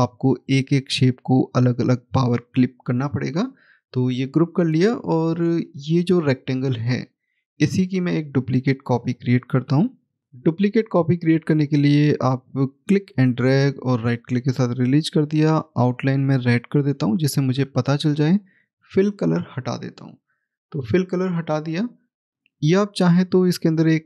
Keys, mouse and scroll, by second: 5.5 click, 12.5 click, 13.0 right click, 16.2 right click, 18.0 click.